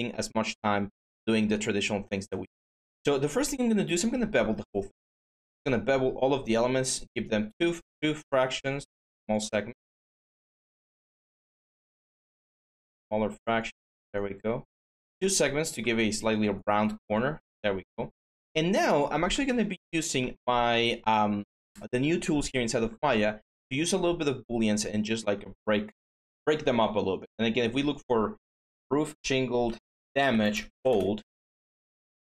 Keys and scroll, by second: 10.9 4, 13.6 5, 25.1 alt+Tab, 28.3 k, 28.4 k, 29.8-31.4 typing.